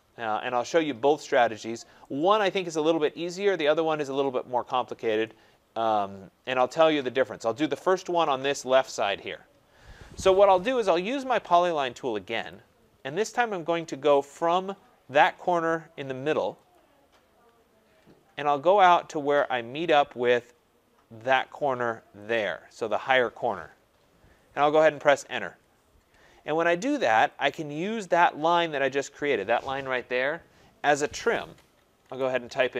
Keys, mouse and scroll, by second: 1.6 middle click, 1.9 right click, 2.2 scroll, 3.6 right click, 3.9 scroll, 4.7 scroll, 6.5 right click, 8.1 scroll, 8.8 middle click, 9.9 scroll, 12.5 click, 13.3-16.7 scroll, 16.7 click, 17.0-17.6 scroll, 18.3-19.6 scroll, 22.3 click, 25.4 Return, 27.5 click, 28.7 click, 31.8-32.7 typing.